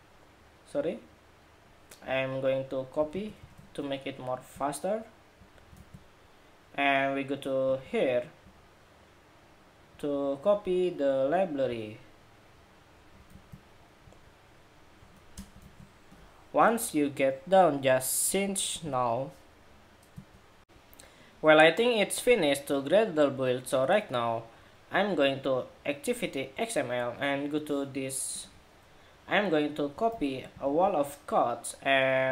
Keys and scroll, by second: 2.8 super+c, 3.2 super+Tab, 5.4 super+v, 13.0 super+c, 15.3 super+v, 20.4 shift+super+2, 29.8 super+c, 30.0 super+c.